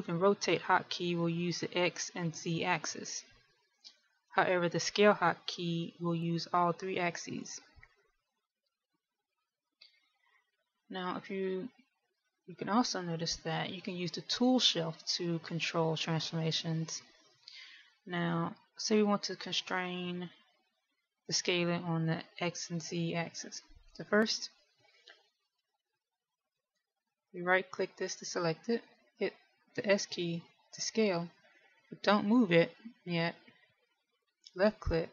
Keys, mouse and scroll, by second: 25.9 middle click, 27.9 right click, 31.1 s.